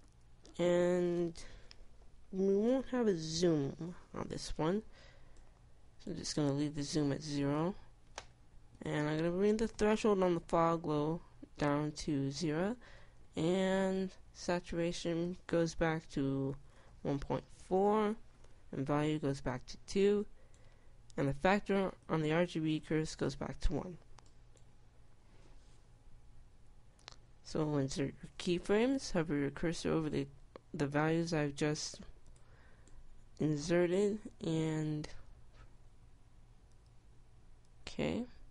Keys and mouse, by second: 11.1-18.8 drag, 20.2-32.1 drag, 32.1 i, 32.9 i, 36.1 i, 37.7 i.